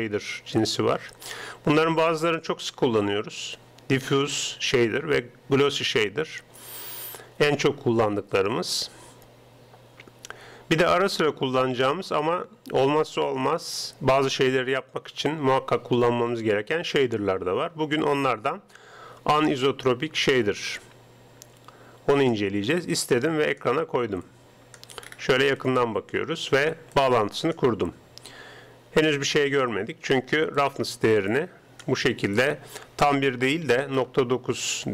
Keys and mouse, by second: 24.2-26.0 drag, 25.0-27.6 middle drag, 25.8 right click, 27.0-28.6 drag, 30.6-32.3 drag, 32.5-34.0 drag.